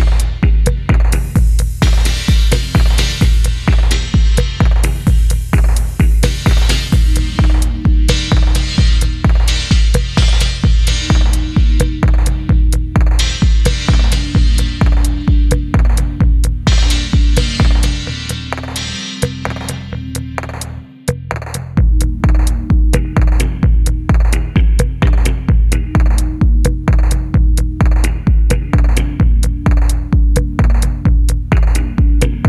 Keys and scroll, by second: 1.1-1.5 typing, 2.5-4.9 typing, 6.0 Tab, 6.9 1, 7.3 Tab, 8.5 e, 9.8 ctrl+v, 10.9 g, 12.2-12.6 typing, 13.6-14.8 typing, 16.1-18.1 typing, 19.7-20.4 typing, 22.7 3, 25.0 ctrl+c, 25.0 ctrl+c, 25.9 ctrl+v, 26.8 g, 28.2 w, 28.2 s, 28.7 g, 29.6 g, 30.8-31.4 typing.